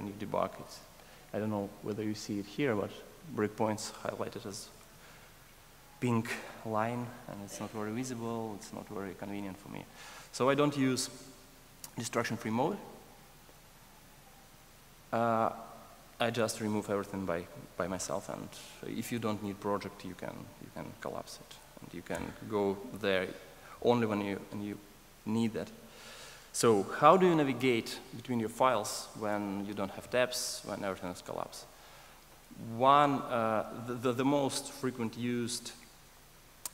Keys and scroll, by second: 21.5 alt+F1.